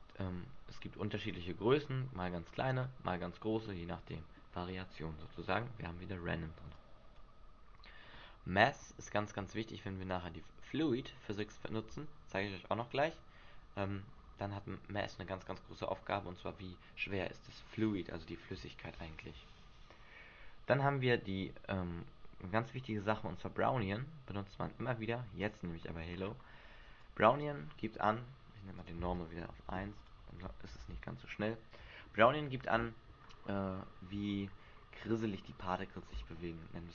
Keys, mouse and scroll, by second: 1.6-2.4 scroll down 4, 2.4 scroll down 1, 3.5 middle click, 4.4-4.9 scroll down 7, 6.7 click, 25.5 click, 26.1 scroll down 2, 26.9 scroll down 2, 26.9 click, 28.7 click, 30.8 alt+a, 32.5 Escape, 33.2-34.1 scroll up 4.